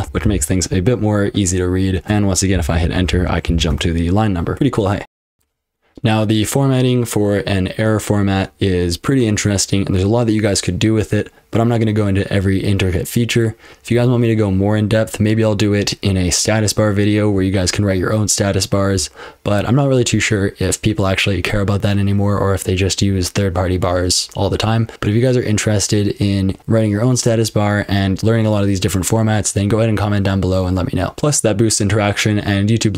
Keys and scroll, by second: 0.0-0.7 typing, 2.0 Return, 2.5 j, 2.9 ctrl+w, 3.1 j, 3.5 j, 3.7 Return, 4.8-7.6 typing, 8.6 Return, 8.9-9.7 typing, 10.5 ctrl+w, 10.7-11.6 typing, 11.9 Return, 14.6-26.5 typing, 29.1 ctrl+w, 29.3 j, 30.8 :.